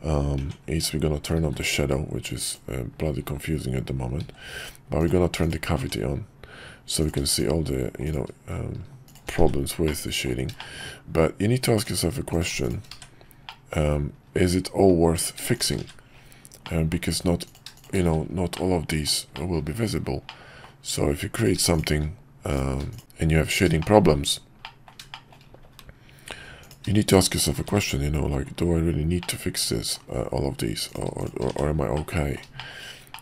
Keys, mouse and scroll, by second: 0.3 Tab, 1.4 alt+v, 5.8 Tab, 7.0 click, 7.3 shift+click, 8.0 click, 9.0 shift+click, 9.8 middle click, 10.6 shift+middle click, 11.8 click, 13.5 middle click, 15.9 1, 16.6 middle click, 17.4 click, 17.7 shift+click, 18.5 middle click, 19.3 shift+middle click, 20.2 middle click, 21.3 click, 23.6 shift+1, 23.8 middle click, 24.6 middle click, 25.1 shift+middle click, 26.6 click, 27.0 shift+click, 27.3 shift+click, 29.2 middle click, 31.9 middle click, 33.1 middle click.